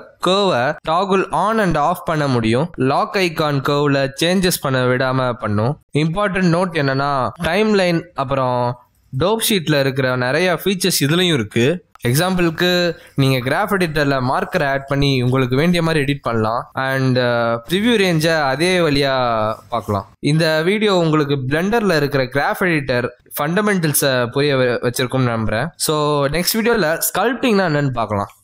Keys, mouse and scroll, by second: 2.2 click, 2.9 click, 6.3 click, 7.6 click, 8.3 g, 9.5 right click, 10.6 click, 11.3 click, 13.0 click, 14.3 space, 15.2 click, 15.8 a, 16.6 click, 18.1 click, 18.2 g, 19.8 click, 23.4 click, 24.3 click.